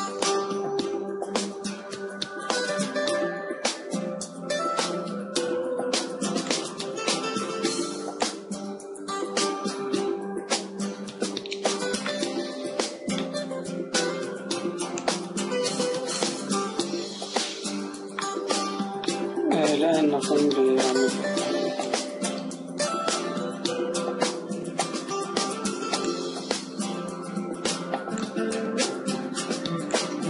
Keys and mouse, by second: 0.9-3.5 right drag, 3.5 ctrl+j, 5.6-7.4 right drag, 7.4-10.8 drag, 10.8-13.2 middle drag, 15.1-17.3 drag, 17.3 middle click, 18.1 click, 18.2-19.8 middle drag, 19.8-21.5 drag, 22.8 a, 24.6 KP_7, 26.0 click.